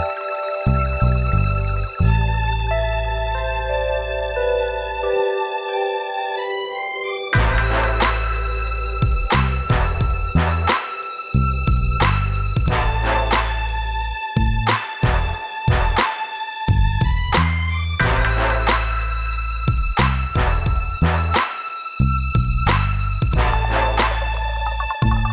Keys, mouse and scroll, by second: 0.7 click, 1.8 click, 3.3 click, 6.0 click, 7.0 click, 7.2 click, 8.5 click, 8.9 click, 9.8 click, 12.5 click, 13.7 click, 15.3 click, 17.2 click, 19.3 click, 20.8 scroll down 2, 21.6 scroll up 2, 23.8 click.